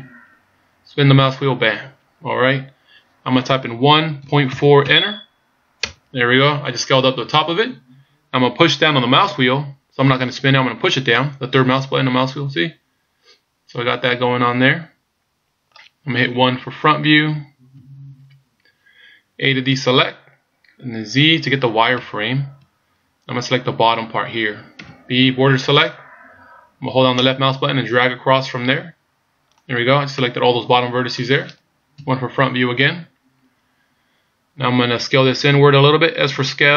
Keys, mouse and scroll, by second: 11.1 middle click, 17.8 KP_1, 19.6 a, 21.9 z, 24.8 b, 30.2 middle click, 31.9 KP_1.